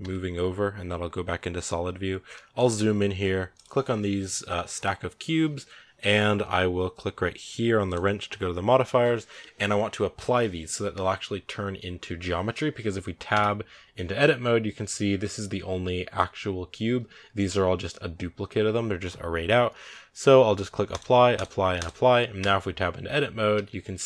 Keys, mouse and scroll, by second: 0.0 z, 1.6-2.2 scroll up 1, 2.2-2.5 shift+middle drag, 2.5-3.4 scroll up 3, 3.4 right click, 12.6-12.9 scroll down 1, 13.2 Tab, 14.7 a, 14.8 a, 17.2 Tab, 20.8 click, 22.3 Tab, 23.4 a, 23.5 a.